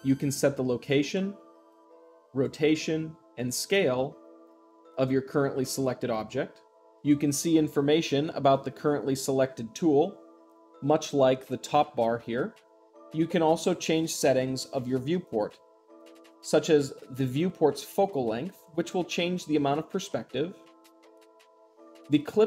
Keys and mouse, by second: 0.0-1.0 drag, 1.6-2.6 drag, 3.3-4.3 drag, 5.7-6.8 middle drag, 6.8 click, 7.9 click, 12.8 click, 17.1 click.